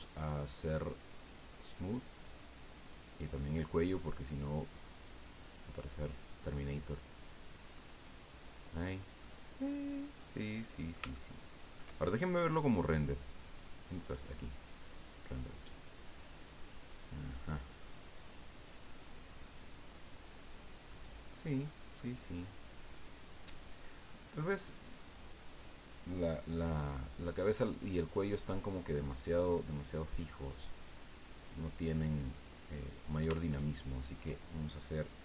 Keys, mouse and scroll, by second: 0.2 right click, 2.1 click, 3.3 right click, 4.9 click, 5.8-7.6 drag, 7.7-8.4 scroll up 2, 8.7-9.0 scroll down 2, 9.2-11.9 middle drag, 14.0 click, 15.1 click, 16.9 scroll down 2, 17.8-21.1 middle drag, 21.9-25.2 middle drag, 28.0 middle click, 30.1 click, 31.9 click, 32.8 right click, 33.4 shift+right click.